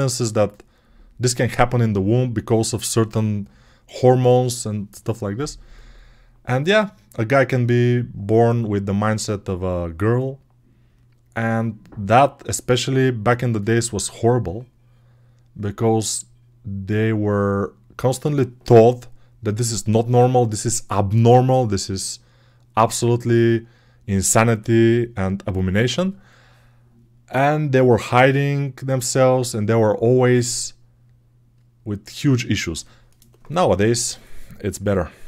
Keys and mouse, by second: 35.1 alt+q.